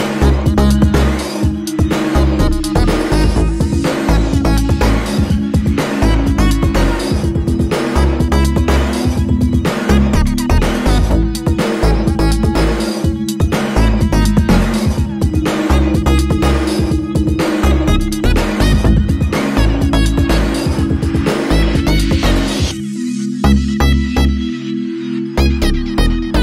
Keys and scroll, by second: 0.0-0.7 typing, 0.8 Return, 2.3-3.1 typing, 6.8-9.5 typing, 11.1-12.4 typing, 13.9 super+d, 23.5 Up, 23.8 Up, 24.3 Up, 24.6 Up.